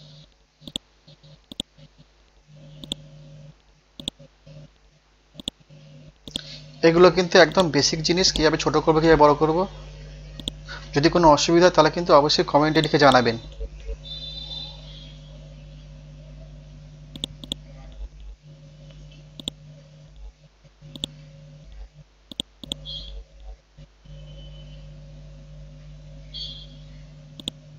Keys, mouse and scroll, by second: 0.7 click, 2.0 ctrl+z, 2.4 ctrl+z, 2.8 click, 3.0 ctrl+a, 4.0 click, 4.4 scroll down 1, 5.4 click, 10.4 click, 13.0 right click, 14.0 F12, 14.5 Tab, 14.7 KP_4, 14.9 Tab, 17.1 click, 17.4 right click, 19.4-25.0 drag, 26.0 ctrl+g, 27.4 click.